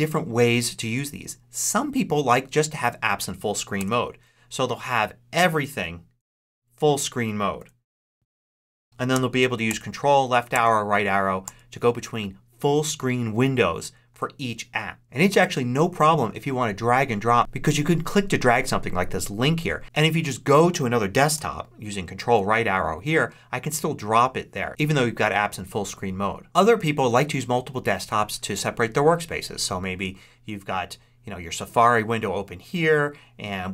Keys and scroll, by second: 3.7 ctrl+Left, 6.1 ctrl+Left, 7.5 ctrl+Left, 9.6 ctrl+Left, 14.0 ctrl+Left, 21.9 ctrl+Right, 26.4 ctrl+Up.